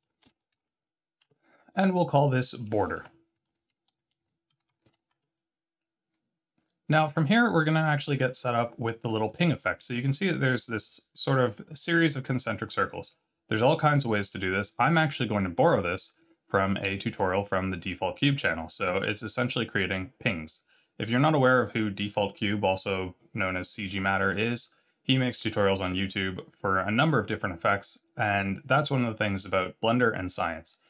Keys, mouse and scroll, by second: 2.0 click, 2.9 F2, 4.6 BackSpace, 7.9 click.